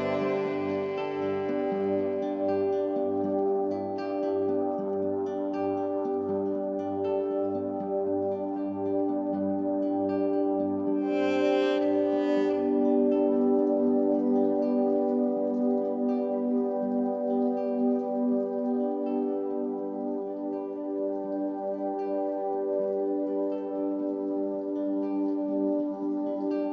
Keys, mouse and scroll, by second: 0.2 shift+click, 4.5 click, 7.5 click, 15.7 Down, 15.9 Down, 16.0 Down, 16.2 Down, 18.2 click, 23.1-24.1 drag.